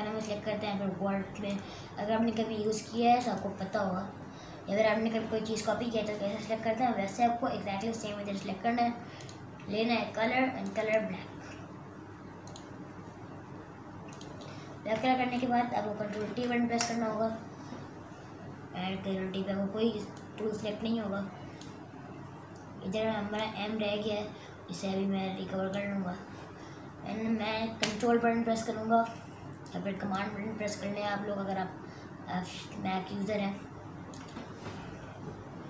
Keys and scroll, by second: 16.2 ctrl+t.